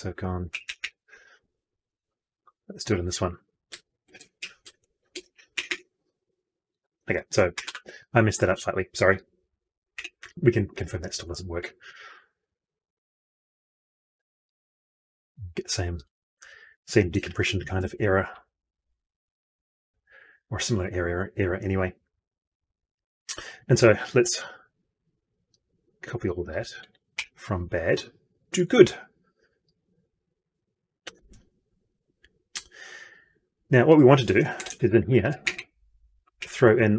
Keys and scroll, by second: 17.1 ctrl+F2, 26.7 ctrl+c, 27.1 F12, 30.9 ctrl+v.